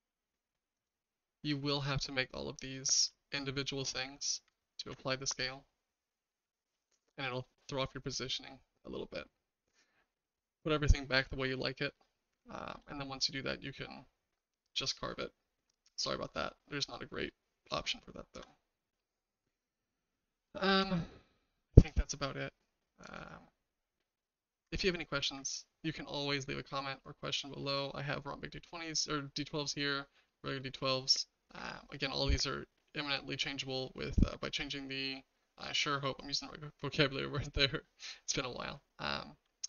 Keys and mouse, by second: 4.8 ctrl+a, 7.0-9.7 shift+middle drag, 8.4 typing, 12.1-12.7 shift+middle drag, 17.3-18.3 shift+middle drag, 19.0 middle click, 20.2-20.8 shift+middle drag, 23.2-26.9 middle drag, 27.3 middle drag, 30.3 middle click, 31.5 middle drag.